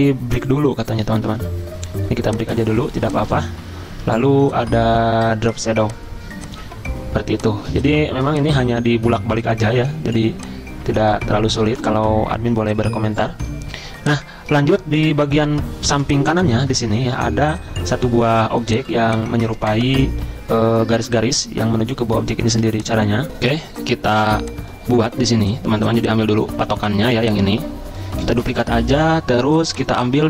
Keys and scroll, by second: 15.9 z, 22.5 z, 23.3 F9, 24.3 z, 28.2 z.